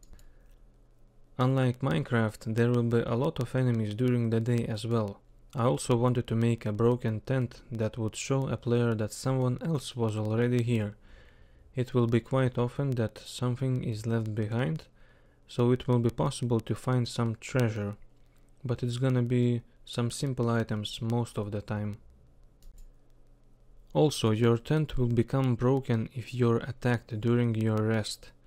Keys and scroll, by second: 10.9 k, 11.9 k, 13.4 k, 14.9 k, 16.2 k, 17.1 k, 17.9 k, 21.2 k, 21.9 k.